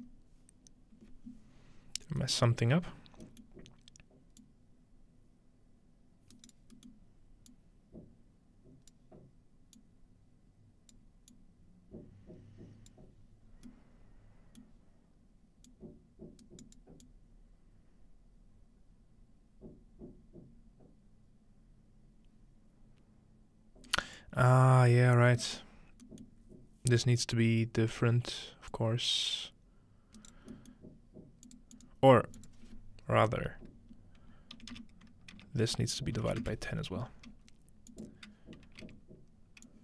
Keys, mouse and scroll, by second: 2.5 middle click, 3.5 middle click, 4.4-6.8 drag, 6.3 right click, 6.6 right click, 7.5-9.0 drag, 9.8-11.0 drag, 11.3-12.9 drag, 13.5 scroll down 1, 13.7-14.6 middle drag, 14.8-15.4 scroll down 1, 15.7-16.8 drag, 16.4 right click, 17.0-24.2 drag, 23.9 right click, 26.0-27.4 scroll up 2, 27.4 click, 28.7-30.6 drag, 30.2 right click, 31.5 click, 31.8 click, 32.4-33.4 drag, 37.9 click, 39.7-39.8 drag.